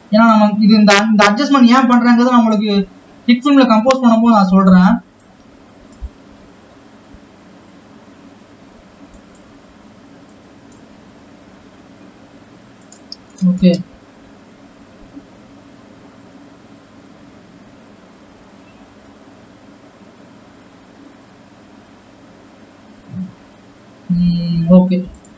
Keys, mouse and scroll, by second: 1.3 g, 3.6 g, 5.4-6.6 drag, 6.6 g, 10.4 click, 11.4 g, 13.8 space.